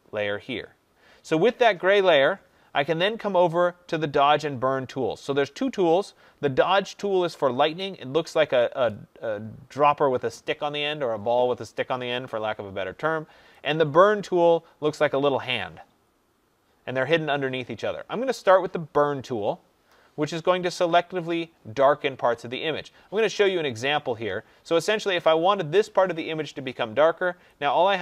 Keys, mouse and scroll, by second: 18.9 click.